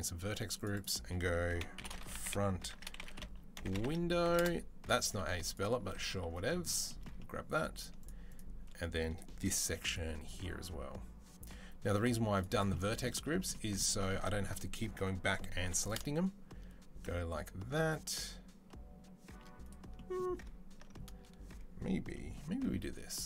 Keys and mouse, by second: 0.4 middle click, 0.7-7.6 drag, 7.6 shift+middle click, 7.8 shift+click, 8.1-23.2 shift+middle drag, 9.5 c, 15.4 i, 22.5 c.